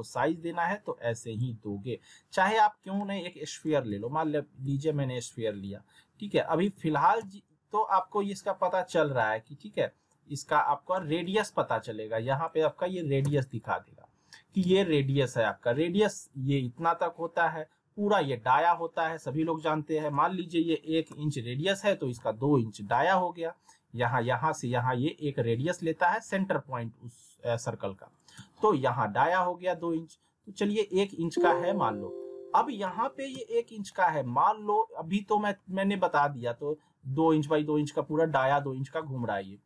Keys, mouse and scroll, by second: 3.9-5.1 typing, 5.6-6.9 click, 6.7 alt+w, 7.2 z, 8.2 middle click, 8.4-9.2 scroll down 1, 9.2-10.7 drag, 11.1 alt+w, 12.3 click, 13.2 z, 13.6-14.2 alt+middle drag, 19.9 click, 28.3 z, 31.0 click, 32.2-32.8 middle click, 32.8 alt+w, 33.3 z, 33.7 scroll down 1, 36.5 alt+w, 38.8 alt+w.